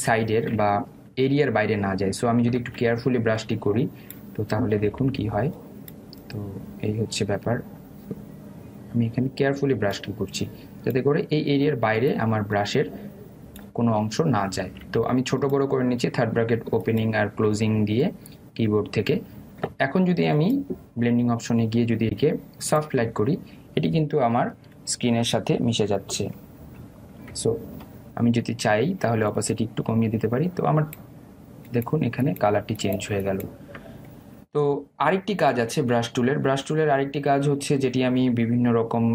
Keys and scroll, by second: 17.7 [, 19.3 ], 27.3 ctrl+0.